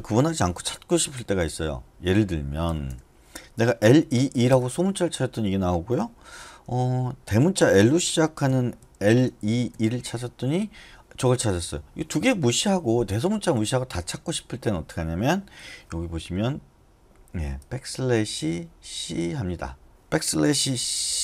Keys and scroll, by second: 2.6-4.1 typing, 4.5 Return, 8.2-9.9 typing, 20.4-21.2 typing.